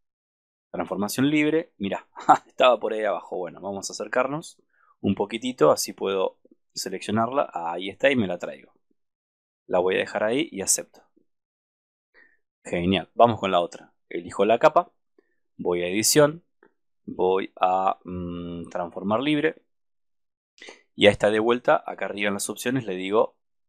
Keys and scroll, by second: 3.0 super+-, 22.2 super+=.